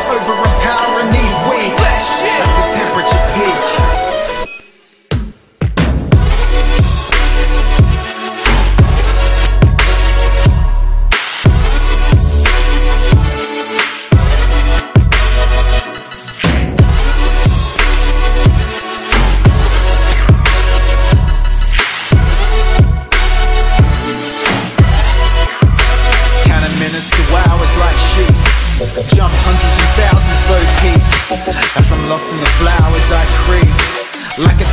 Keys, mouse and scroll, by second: 0.7 click, 2.3 Delete, 2.6-3.8 drag, 11.4 F11, 11.6 F10, 12.2 click, 15.0 F10, 15.4 click, 15.9-17.2 typing, 17.9-20.6 drag, 20.7 right click, 21.6 click, 22.6 F10, 23.4-24.5 drag, 23.8-25.5 typing, 25.8 click, 26.1 Delete, 26.6 click, 26.9-28.6 typing, 28.7 Down, 28.9 Return, 30.2 click, 34.5 right click.